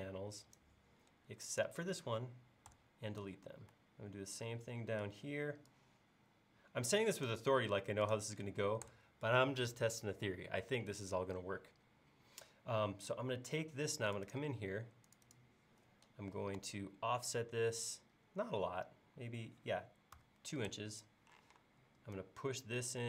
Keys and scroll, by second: 2.7 BackSpace, 8.9 BackSpace, 16.6 f, 20.2 2, 20.7 Return.